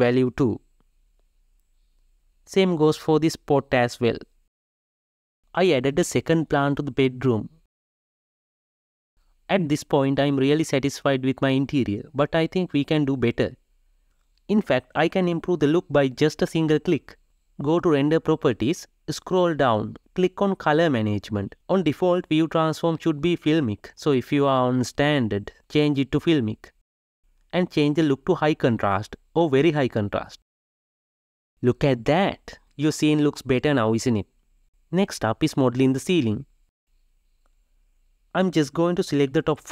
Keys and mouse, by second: 1.0 click, 4.6 click, 5.3 g, 6.2 KP_0, 6.6 g, 8.6 click, 16.0-31.7 drag, 38.0 ctrl+shift+middle click.